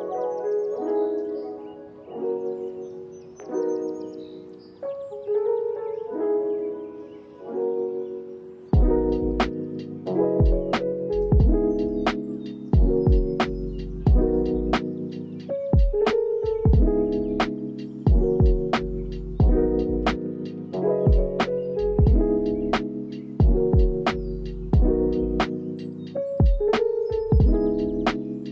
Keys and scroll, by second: 15.9 Escape.